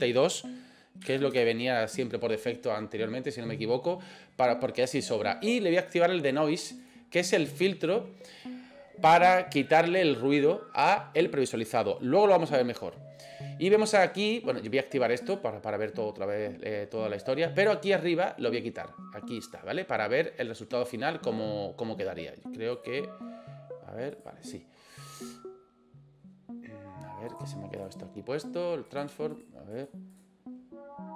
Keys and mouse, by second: 6.8 click, 15.2 click, 19.4 click, 22.7 click, 24.1 click, 28.9 click, 29.3 click, 29.7 click, 30.1 click.